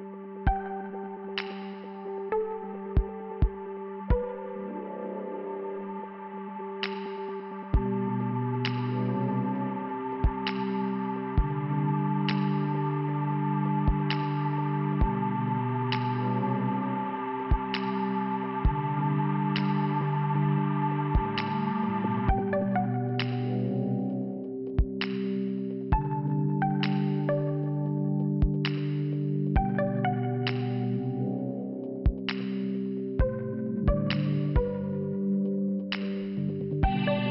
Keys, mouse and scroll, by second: 0.5 click, 2.2 click, 2.8 scroll up 1, 3.2 scroll down 2, 8.7 middle click, 11.0 click, 13.2 click, 15.1 click, 16.6 click, 16.7 click, 17.3 click, 17.7 click, 17.9 click, 18.0 click, 18.5 Return, 19.7 click, 23.1 click, 24.0 scroll down 1, 24.7 scroll down 1, 24.8 click, 25.8 click, 28.7-29.2 scroll up 2, 32.0 middle click, 34.0 click.